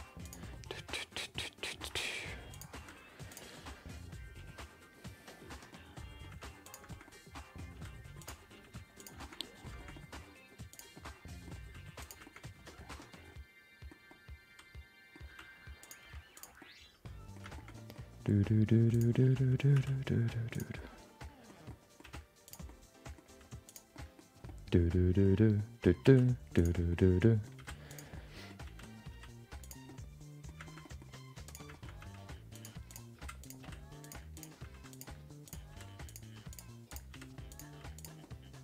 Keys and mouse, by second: 0.6 middle click, 1.5 middle click, 1.8 e, 2.7 r, 3.5-5.7 middle drag, 6.1 middle click, 6.6 g, 6.9 shift+middle click, 7.2 middle click, 7.7 r, 8.6 g, 9.4 middle click, 10.0 middle click, 10.7 click, 10.9 middle click, 11.6 g, 12.3 middle click, 12.9 middle click, 14.2 middle click, 15.2 r, 16.0 g, 16.7 middle click, 17.5 shift+middle click, 17.8 middle click, 18.3 middle click, 18.9 click, 19.3 middle click, 20.2 e, 20.9 middle click, 21.8 middle click, 22.4 r, 22.8 middle click, 23.2 g, 24.0 middle click, 24.6 middle click, 25.7 middle click, 26.0 e, 27.0 middle click, 27.9 g, 28.2 middle click, 28.6 r, 30.0 middle click, 30.7 middle click, 31.4 click, 31.8 middle click, 32.0 g, 32.9 click, 33.1 g, 33.6 r, 34.3 click, 34.6 g, 35.4 click, 35.7 r, 36.2 g, 36.9 click, 37.1 r, 37.6 g, 38.3 middle click.